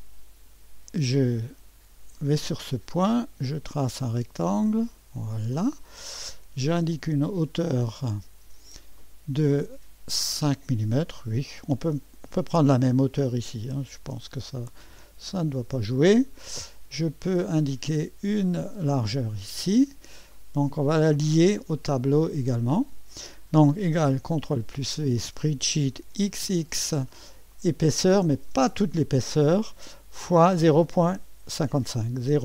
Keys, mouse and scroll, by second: 2.9 click, 4.8 click, 5.6 middle click, 7.2 click, 9.0-12.1 drag, 13.9 5, 14.9 Return, 18.4-20.5 drag, 22.7 click, 24.6 ctrl+v, 26.1-26.4 typing, 27.5-28.6 drag, 30.2 KP_Multiply, 32.3 KP_0.